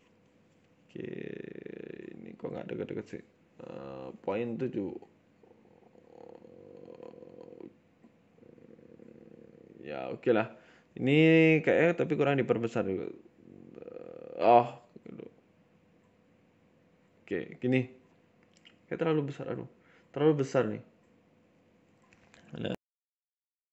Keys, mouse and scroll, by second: 0.6-1.1 scroll up 1, 1.2 click, 2.6 click, 4.6 scroll down 4, 4.8 middle click, 5.1-5.5 scroll up 3, 5.3 middle click, 5.6 middle click, 6.4 scroll down 2, 6.6 middle click, 7.0 middle click, 7.3 middle click, 7.7 middle click, 8.6 middle click, 9.4 middle click, 9.7-10.1 scroll up 1, 10.1 `, 10.7 Tab, 10.9 middle click, 11.5 KP_7, 12.1 click, 12.7 s, 14.5 click, 16.0 s, 16.7 Tab, 16.8 middle click, 17.2 scroll up 1, 17.4 shift+middle click, 17.8 ctrl+z, 18.4 ctrl+z, 18.6 s, 20.4 click, 21.2 s, 22.6 Tab, 22.9 middle click, 23.2 shift+middle click.